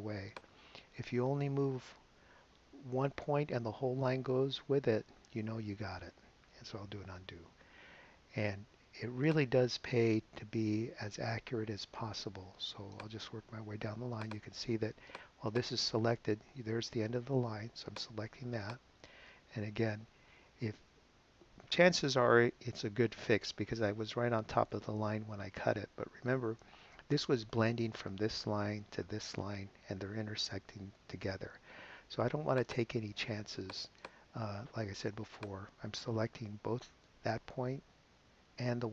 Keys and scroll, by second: 7.1 super+z.